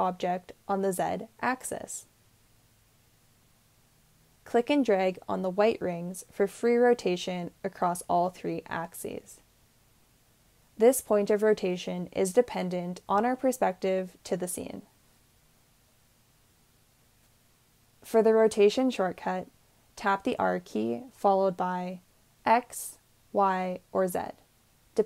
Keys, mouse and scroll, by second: 19.2 r, 21.9 x, 21.9 y, 21.9 z.